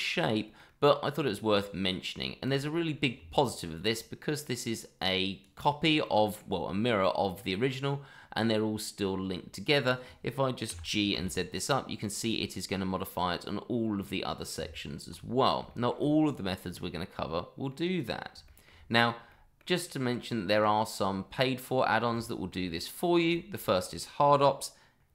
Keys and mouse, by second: 0.7-2.1 middle drag, 2.4 click, 3.1 Tab, 4.2-4.6 middle drag, 5.0-5.4 drag, 6.0-6.4 middle drag, 7.7-10.0 middle drag, 10.7 g, 11.1 z, 12.0 click, 12.5-14.5 middle drag, 14.6 Tab, 15.7 shift+middle drag, 17.7-18.2 middle drag, 18.4 shift+middle drag, 19.3 middle click, 20.5 click, 22.1-22.5 shift+middle drag, 22.7-23.1 middle drag, 23.3 shift+middle drag, 23.8-24.3 middle drag.